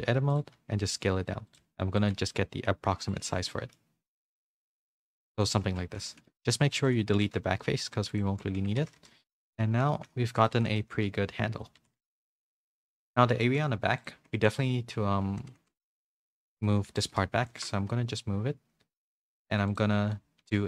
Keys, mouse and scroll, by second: 0.4 g, 1.6 s, 2.1 g, 3.2 z, 3.5 middle click, 4.1 g, 5.6 z, 6.1 shift+middle click, 6.4 3, 7.2 x, 8.3-10.7 typing, 8.6 Tab, 9.0 middle click, 9.9 middle click, 10.7 middle click, 11.4 middle click, 12.4 shift+middle click, 12.4 a, 13.4 shift+middle click, 14.1 Tab, 14.3 3, 14.5 click, 15.5 ctrl+z, 16.0 w, 16.8 3, 16.9 click, 17.5 alt+s, 19.5 2, 19.7 click, 20.1 middle click.